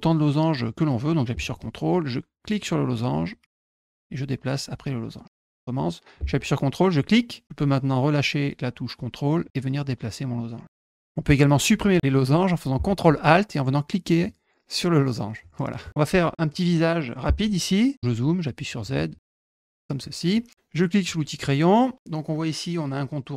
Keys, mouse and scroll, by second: 2.4 ctrl+click, 3.5 ctrl+click, 3.8-5.0 drag, 6.9 ctrl+click, 9.4-11.0 drag, 14.0 ctrl+alt+click, 15.3 ctrl+alt+click, 18.6 click, 19.6 click, 19.9 middle click, 21.0 click.